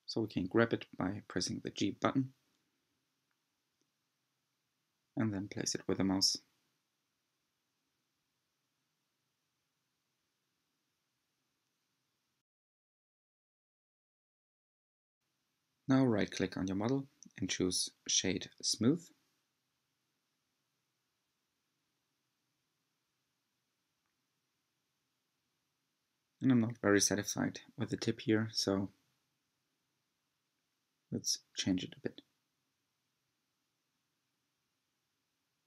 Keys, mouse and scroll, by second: 0.0 g, 2.3 2, 3.2 alt+click, 4.4 g, 8.5 click, 10.2 3, 10.6 click, 11.7 g, 13.9-14.4 scroll down 3, 14.4-15.4 middle drag, 15.4-16.4 scroll down 6, 17.1 Tab, 18.4-19.0 right drag, 19.0-20.9 middle drag, 20.9-21.2 scroll up 3, 21.5 Tab, 22.2 shift+middle click, 22.7-23.2 scroll up 4, 23.9 2, 24.8 alt+click, 25.7 s, 30.7 Tab, 30.9-31.7 scroll down 8, 32.0-35.0 middle drag.